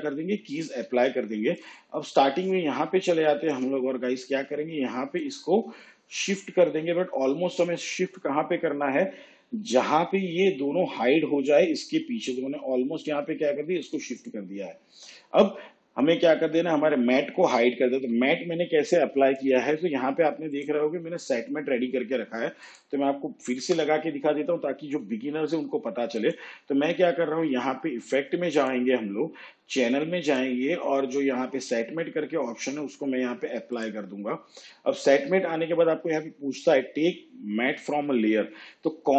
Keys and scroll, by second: 23.7 Delete.